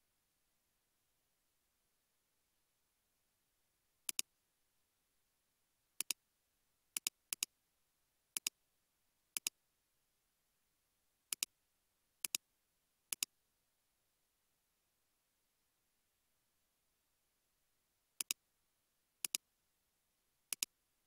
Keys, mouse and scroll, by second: 0.0-1.7 typing, 4.2-5.1 typing, 7.1-7.9 typing, 7.4 double click.